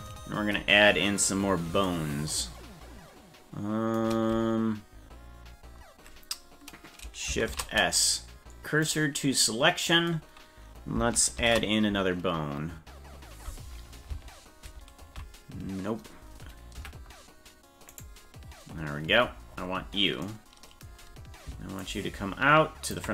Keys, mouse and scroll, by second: 7.5 shift+s, 11.4 shift+a, 14.6 ctrl+;, 16.1 scroll up 2, 16.8 KP_Decimal, 17.9 right click, 18.5-20.2 scroll down 31, 21.8-23.0 ctrl+drag.